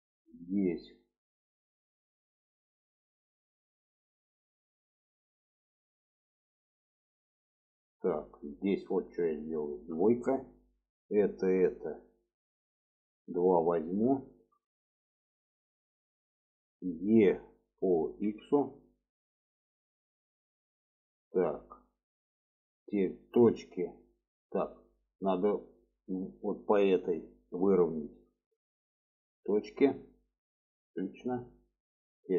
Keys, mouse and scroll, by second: 1.0 shift+middle click, 2.1 middle click, 2.7 shift+middle click, 3.6 middle click, 4.9 shift+middle click, 6.1-6.5 shift+middle drag, 9.7 2, 10.5 click, 11.3 click, 11.7-12.1 middle drag, 13.0-14.0 middle drag, 14.2 shift+middle drag, 14.7 middle click, 17.4 e, 20.6 shift+middle click, 21.6 shift+middle click, 24.0-24.8 middle drag, 28.3-29.8 ctrl+drag, 30.3-31.4 middle drag, 31.9 click.